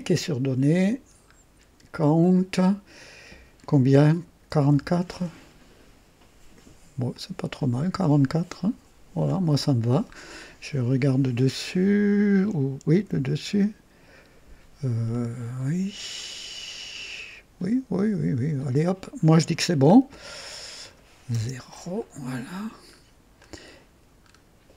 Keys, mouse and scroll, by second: 0.8-1.1 scroll down 1, 2.2 click, 4.5 KP_4, 4.7 KP_4, 5.1 Return, 7.1-9.5 drag, 9.7-10.2 scroll down 1, 13.0 KP_2, 15.1 right click, 16.3-19.0 right drag, 19.7-20.1 scroll down 1, 20.1 click, 21.3 KP_0, 22.0-22.6 right drag, 22.9 scroll up 1, 23.4-24.0 right drag, 24.2 scroll up 1.